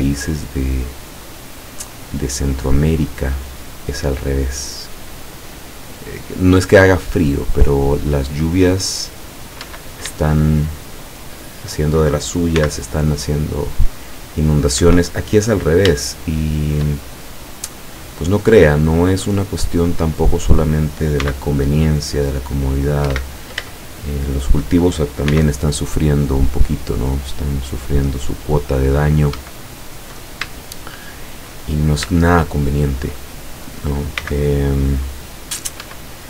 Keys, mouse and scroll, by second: 1.6 click, 3.5 click, 8.0-9.8 drag, 9.7 Escape, 10.4-12.0 shift+middle drag, 12.6 c, 13.7 click, 14.9 Escape, 16.1-17.4 shift+middle drag, 18.2-20.8 middle drag, 21.3 c, 22.1 click, 23.1 Escape, 23.8 shift+middle click, 25.4 c, 26.1-29.4 drag, 29.4 Escape, 30.0-30.5 scroll down 1, 30.9 shift+middle click, 31.8-32.1 shift+scroll up 2, 32.2-33.2 shift+middle drag, 34.2 c, 35.1 click, 35.9 Escape.